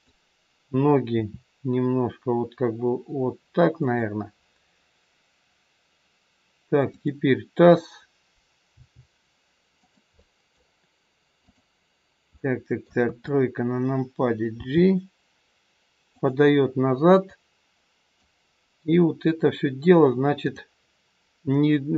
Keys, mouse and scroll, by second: 1.1 r, 6.9 click, 8.7 g, 10.1 middle click, 11.3 click, 12.3 middle click, 13.0 KP_3, 14.4 g, 17.3 click, 20.4 click.